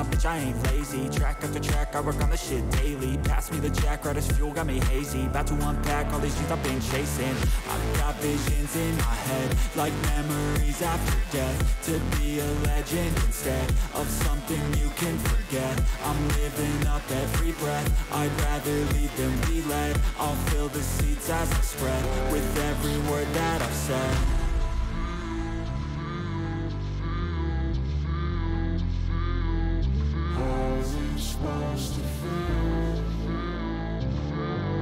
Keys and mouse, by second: 2.5 click, 4.9-6.3 drag, 8.5-9.9 drag, 10.8 ctrl+t, 12.3 click, 12.9 ctrl+click, 14.8 click, 16.8-17.9 ctrl+drag, 20.1 click, 21.9-23.3 drag, 24.1 click, 24.8 click, 26.9 alt+shift+click, 27.7 click, 28.4 shift+click, 29.6 click, 30.1 click, 32.3-33.9 drag.